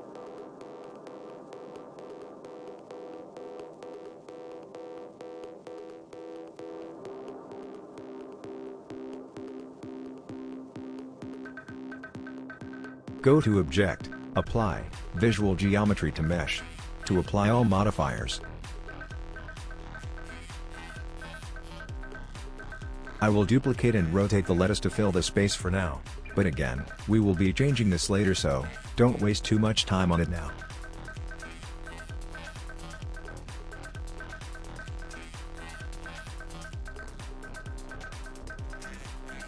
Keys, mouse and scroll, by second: 1.0 click, 5.2 click, 9.6 scroll down 4, 10.4 middle click, 11.2 click, 16.2 click, 19.5 click, 19.6 middle click, 20.3 scroll up 5, 21.2 scroll down 7, 21.7 middle click, 22.4 scroll up 1, 23.0 click, 23.9 shift+d, 25.6 g, 25.9 r, 28.7 click, 29.4 click, 30.1 g, 31.3 right click, 31.6 click.